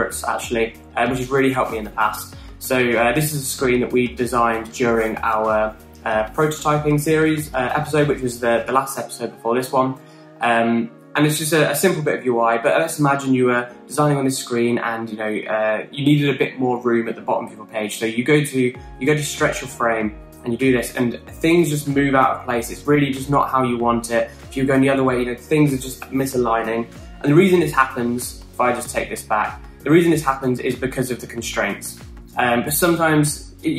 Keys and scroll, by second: 28.9 super+z, 29.4 super+z.